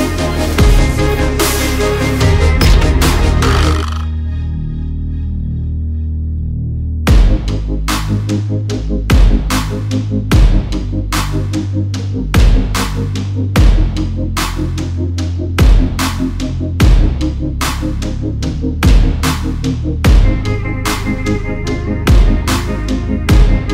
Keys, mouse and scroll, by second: 1.1 click, 3.6 click, 4.3 click, 4.6 alt+shift+click, 5.9 alt+scroll up 2, 7.5 click, 12.4 alt+click, 13.7 click, 21.0 ctrl+z, 21.6 click, 23.1 click, 23.5 alt+click.